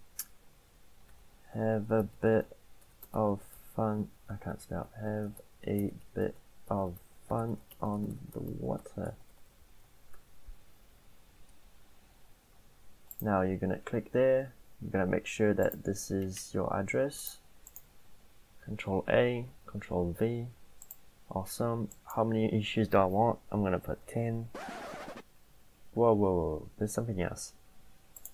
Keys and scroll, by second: 0.9-10.2 typing, 4.1 ctrl+a, 18.0 ctrl+a, 19.5 ctrl+v, 23.6-24.6 typing.